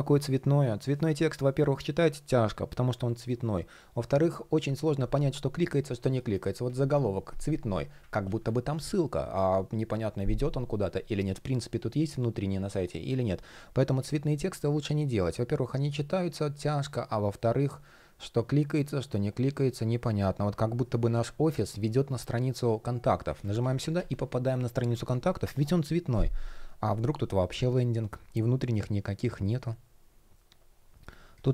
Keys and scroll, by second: 5.8 shift+p, 7.8 super+z, 20.4 shift+p, 22.9 super+z, 24.5 super+z, 30.6 shift+p, 31.4 super+z.